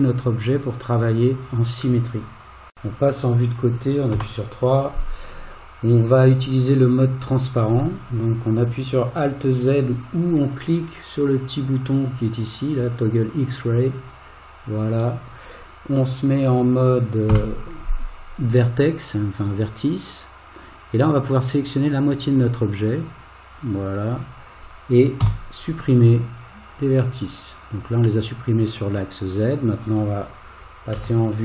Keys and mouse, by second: 3.7 click, 4.1 KP_3, 14.1 click, 17.3 1, 21.6-23.6 drag, 25.2 x, 28.3-30.0 middle drag, 31.0 KP_1.